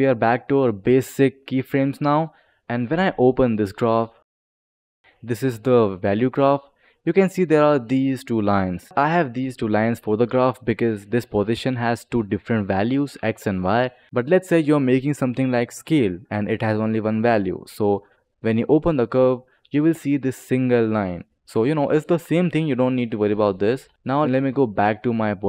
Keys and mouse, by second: 2.3 click, 3.1 click, 3.4 click, 4.0 click, 4.8 click, 6.4 click, 12.0 click, 12.6 click, 13.6 click, 14.0 ctrl+z, 14.0 click, 14.8 click, 15.4 click, 16.4 click, 17.0 click, 17.8 click, 18.4 click, 19.1 click, 23.0 click, 23.8 ctrl+z, 23.9 ctrl+z, 24.3 ctrl+z, 25.1 click.